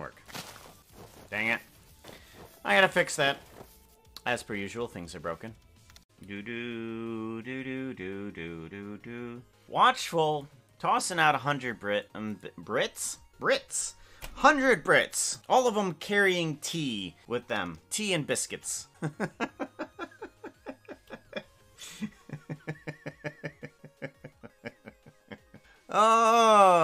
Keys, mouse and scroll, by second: 6.0 ctrl+s.